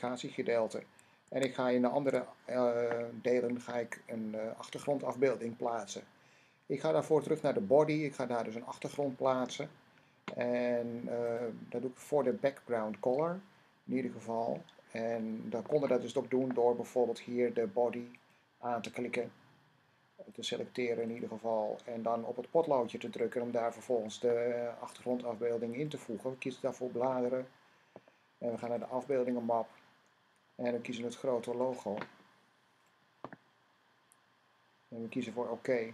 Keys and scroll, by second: 1.1 Tab.